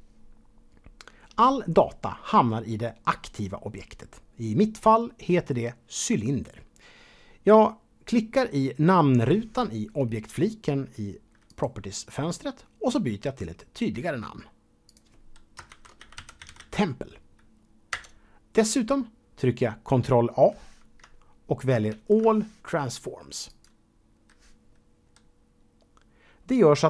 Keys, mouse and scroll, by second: 11.5 click, 18.5 Return, 21.9 ctrl+a, 23.5 click.